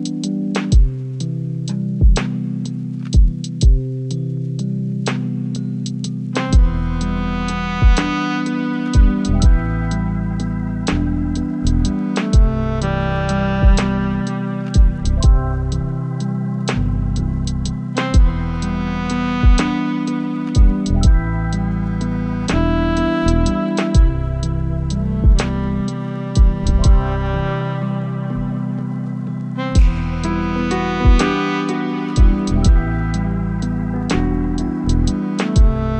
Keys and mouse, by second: 0.0 click, 0.9 click, 3.5 click, 5.4-6.6 drag, 9.6 click, 10.1-11.1 drag, 12.0-12.5 drag, 13.2 click, 14.3 click, 15.2-15.8 drag, 16.7 click, 17.5 click, 22.1 r, 22.8 x, 28.1 click, 28.6 shift+drag, 30.1-31.7 drag, 32.7 click, 33.6 shift+middle click.